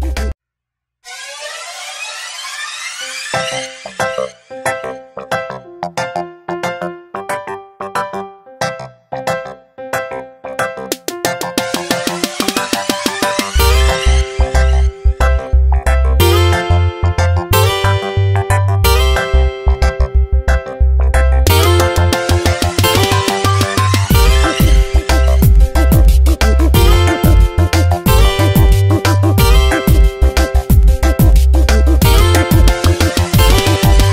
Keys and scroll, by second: 2.7 Return, 3.2 ctrl+t, 10.2 Return, 14.0 ctrl+t, 17.7 Return, 18.2 shift+Right, 24.7 ctrl+t, 30.2 Return, 30.9 ctrl+t, 32.6 Tab.